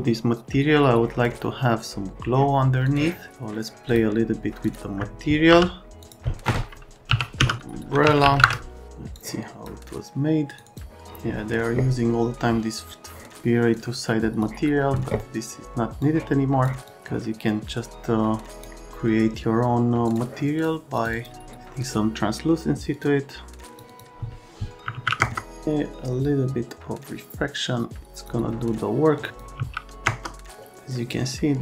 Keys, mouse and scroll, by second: 2.8 click, 3.8 click, 4.6 click, 5.5 n, 6.0 click, 6.8-8.8 typing, 13.7 click, 16.0 click, 16.8 click, 20.0 click, 20.5 click, 20.9 click, 22.9 click, 23.6 Num_Lock, 23.8 Num_Lock, 25.0 KP_1, 25.2 KP_Enter, 25.6 Num_Lock, 29.5 KP_1, 30.0 KP_Enter.